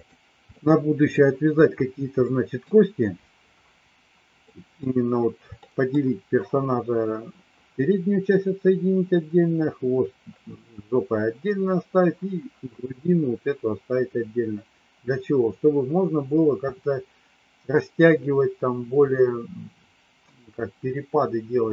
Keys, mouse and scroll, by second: 0.4 middle click, 2.2 middle click, 4.3 middle click, 5.6 middle click.